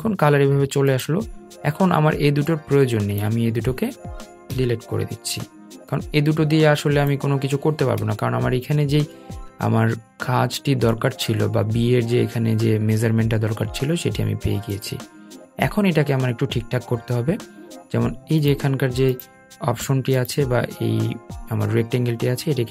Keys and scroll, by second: 5.7 BackSpace.